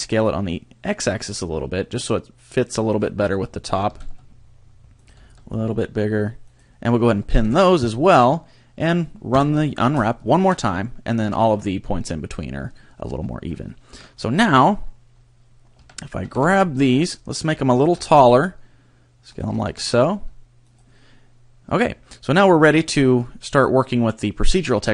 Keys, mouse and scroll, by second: 3.0 click, 3.8 g, 5.0 click, 5.2 s, 6.6 click, 7.4 p, 9.3 u, 11.2 a, 13.2 scroll down 2, 13.6 shift+middle click, 14.0-14.4 scroll down 2, 15.1 scroll up 1, 15.8 a, 16.2 a, 16.4 b, 17.4 s, 19.4 click, 19.6 g, 20.7 click.